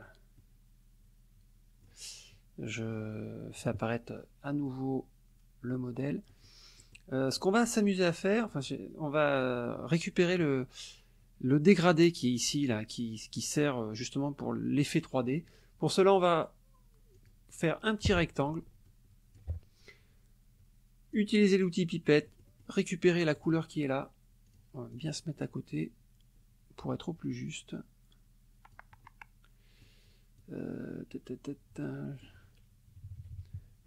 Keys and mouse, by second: 0.4-2.1 middle drag, 3.6 click, 4.2 middle click, 6.4 middle click, 6.8 middle click, 7.4 middle click, 8.1 middle click, 17.1 click, 17.9-19.6 drag, 21.2 click, 22.3 middle click, 23.4 click, 24.5 click, 24.9-28.9 drag, 29.0 middle click, 30.4-32.4 drag, 32.9 KP_Subtract.